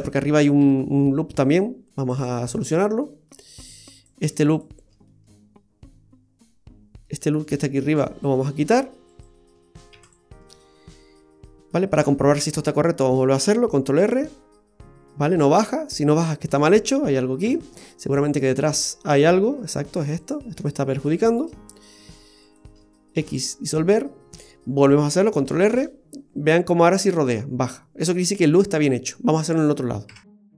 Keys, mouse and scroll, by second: 2.1 click, 2.7 middle click, 3.9 right click, 4.4 alt+shift+right click, 5.1 middle click, 7.9 right click, 8.3 middle click, 9.1 shift+right click, 9.9 x, 10.5 middle click, 13.9 ctrl+r, 19.1 middle click, 20.2 right click, 20.7 alt+shift+right click, 21.8 right click, 22.5 shift+right click, 23.3 x, 23.8 middle click, 25.4 ctrl+r.